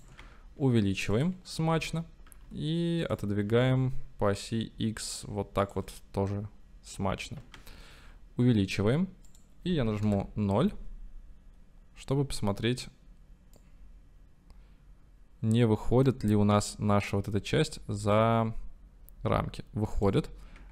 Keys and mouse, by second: 0.2 s, 1.2 click, 1.7 g, 2.0 y, 3.1 click, 3.5 g, 3.6 x, 5.7 click, 7.5 s, 9.4-10.0 drag, 10.0 KP_0, 13.9-16.3 drag, 18.7 click, 20.2-20.7 drag.